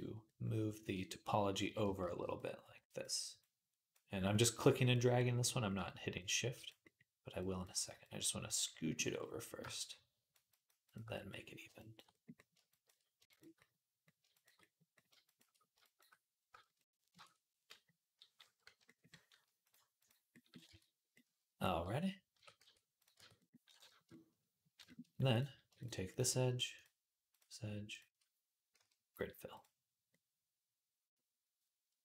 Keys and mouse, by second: 1.4 ], 1.6 ], 1.8 ], 2.0 ], 17.0 ctrl+Tab, 18.5 /, 20.0-32.0 right drag, 20.5 Tab, 22.2 Tab, 22.4 q, 22.9 Tab, 26.6 shift+click, 26.6 shift+middle click, 27.7 shift+click, 27.7 shift+middle click, 28.6 q.